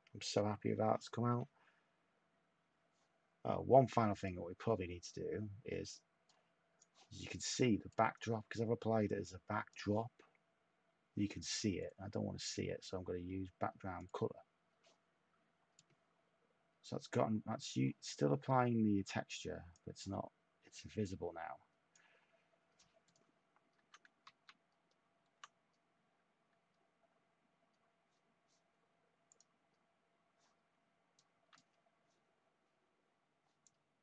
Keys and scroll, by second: 24.2 ctrl+z.